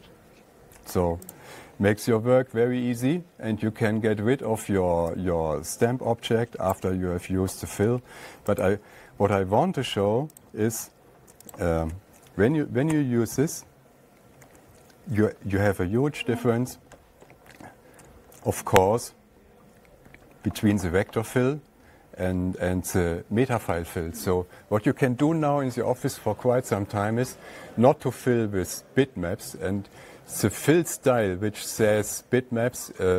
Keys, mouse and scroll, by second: 1.8 click, 7.2 click, 9.1 click, 10.8 click, 12.0 shift+click, 13.4 *, 14.9 /, 16.6 ctrl+scroll down 1, 16.7 ctrl+scroll, 16.9 ctrl+scroll down 2, 17.0 ctrl+scroll, 17.3 ctrl+scroll down 8, 17.6-17.9 ctrl+scroll, 18.4 ctrl+scroll down 11, 18.7-19.2 scroll, 20.3 shift+scroll, 21.1-21.7 shift+scroll, 22.3 shift+scroll, 22.9-23.4 shift+scroll, 23.7 shift+scroll, 26.1 shift+scroll.